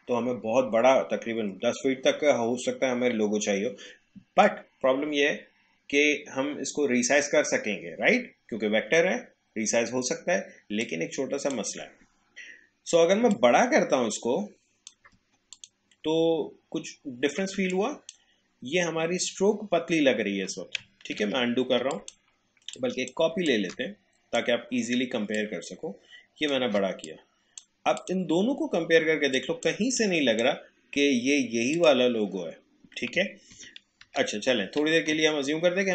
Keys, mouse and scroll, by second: 10.8-13.3 drag, 16.7-17.3 alt+scroll down 1, 17.6 space, 17.7 click, 18.1 space, 20.8 space, 21.2 ctrl+z, 21.9 click, 23.5-25.3 alt+drag, 27.1-31.7 drag, 33.5 ctrl+z.